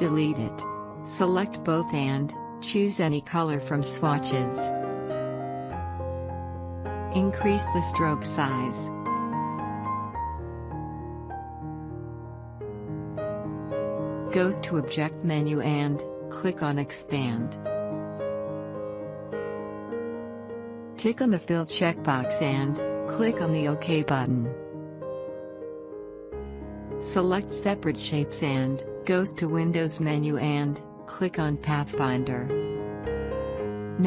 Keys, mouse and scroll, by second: 4.0-13.0 drag, 13.0-15.9 scroll up 1, 17.5 click, 20.4 click, 23.8 click, 28.2-32.0 drag.